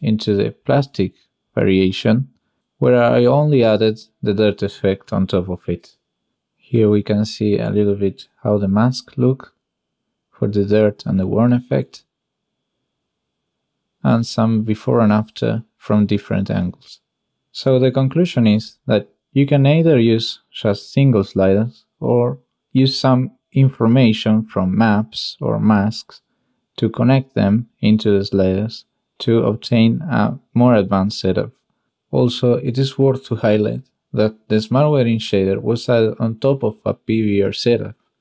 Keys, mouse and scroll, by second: 1.5 click, 2.4 click, 6.5 click, 7.7 click, 8.6 click, 9.3 click, 10.2 click, 11.6 click, 14.0 click, 16.7 click, 18.7 click, 21.5 drag, 21.9 shift+drag, 23.7 click, 25.5 click, 27.7-28.3 drag, 28.5 shift+click, 33.1 click, 34.6 click, 37.7-38.1 drag, 38.1-38.2 middle drag.